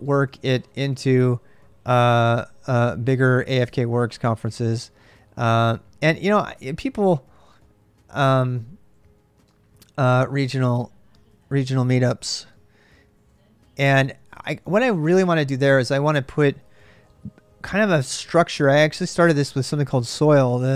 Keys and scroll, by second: 0.0-1.3 typing, 2.9-3.6 typing, 5.1-17.3 typing.